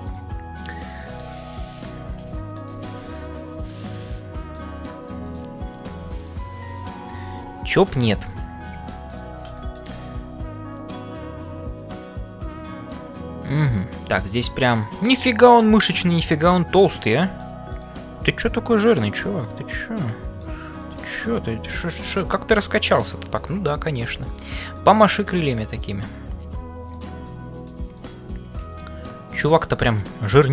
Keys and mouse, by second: 2.3 shift+middle click, 2.8-4.6 middle drag, 5.3 click, 6.6 click, 7.2 g, 8.3 click, 9.5 middle click, 9.9-17.5 middle drag, 19.3-20.5 middle drag, 21.6 g, 22.3 middle click, 23.3 click, 24.7 middle click, 25.7 click, 26.4 g, 27.3 middle click, 27.9 click, 28.6 g, 29.8 middle click.